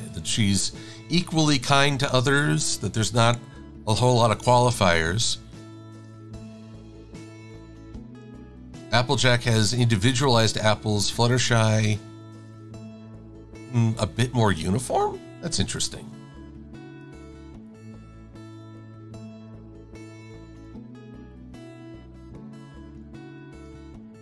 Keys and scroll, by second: 0.3 shift+super+a, 6.3 e, 17.2 v, 23.2 e.